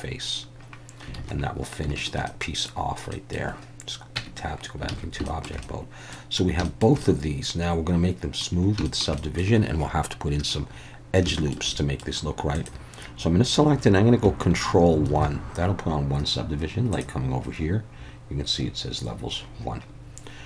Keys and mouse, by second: 1.2 alt+a, 2.0 shift+middle click, 2.3 middle click, 3.1 middle click, 4.2 Tab, 4.9 alt+a, 5.3 shift+middle click, 5.6-6.1 middle drag, 6.6 shift+middle click, 7.1-8.4 middle drag, 8.8 shift+middle click, 9.2 middle click, 11.3 shift+middle click, 11.7 middle click, 15.1 ctrl+1, 16.9 click.